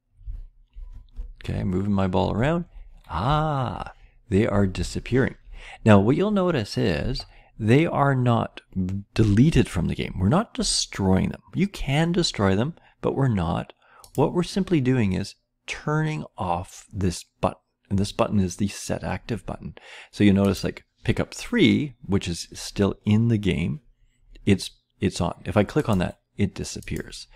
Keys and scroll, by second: 0.2 Down, 0.8 Right, 1.4 Up, 1.4-2.3 Left, 2.4 Right, 3.2 Left, 4.0 Right, 4.6 Right, 4.7-5.4 Down.